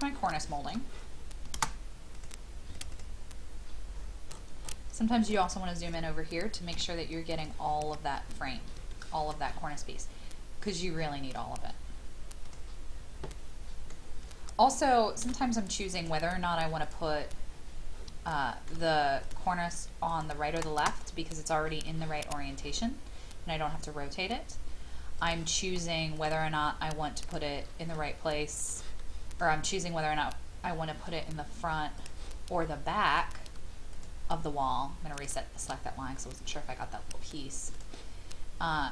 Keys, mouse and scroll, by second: 0.3 shift+middle click, 0.7 scroll down 1, 2.1 click, 3.9-5.2 scroll up 1, 5.2 click, 6.7 m, 7.4 click, 7.7 click, 8.2 scroll down 1, 8.9 shift+middle click, 10.6 scroll up 1, 12.9-13.3 scroll down 1, 13.3 middle click, 13.7 scroll down 1, 16.0 click, 17.1-18.0 scroll down 1, 18.3 shift+middle click, 19.2 click, 27.2 shift+click, 28.6 click, 29.0-30.0 middle drag, 31.9-33.0 drag, 33.9 shift+click, 35.1 shift+click, 37.7 click.